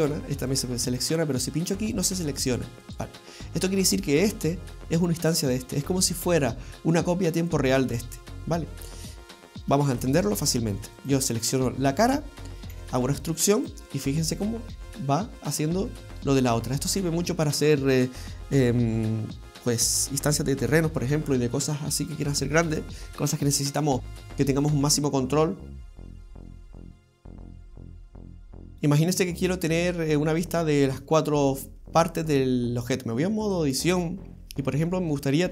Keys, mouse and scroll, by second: 28.1 alt+q, 28.1 middle click, 28.1 click, 28.1-28.4 scroll down 3, 32.8 click, 33.9 scroll down 1, 34.2 scroll up 2, 35.1 middle click.